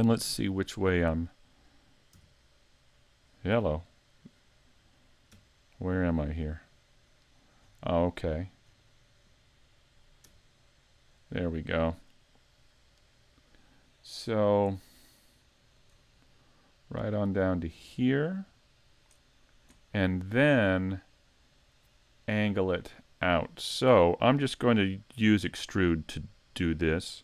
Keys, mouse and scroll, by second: 0.3 KP_3, 2.1 KP_Decimal, 3.3-5.3 scroll down 15, 5.3 KP_5, 6.0-7.3 scroll down 3, 7.3 scroll down 1, 7.8 scroll up 6, 8.8-10.4 scroll up 5, 10.4 KP_1, 11.3-12.0 scroll up 2, 12.7-13.5 scroll up 2, 15.3 middle click, 15.9 scroll up 1, 17.1 click, 17.5 click.